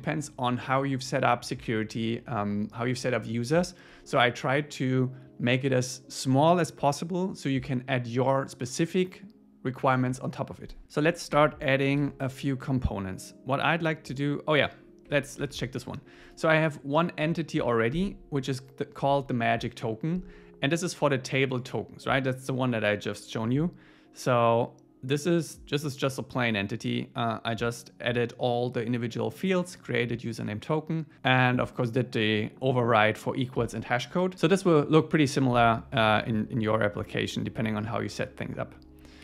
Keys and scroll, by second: 11.3 super+w, 12.0 super+1, 15.1 super+1.